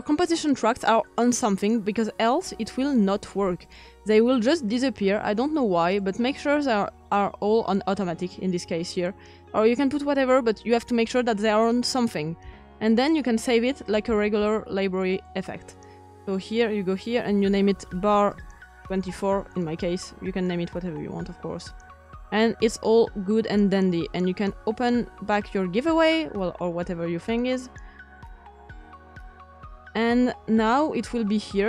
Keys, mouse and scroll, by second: 12.7-19.0 shift+drag, 19.0 typing, 23.7-27.8 drag.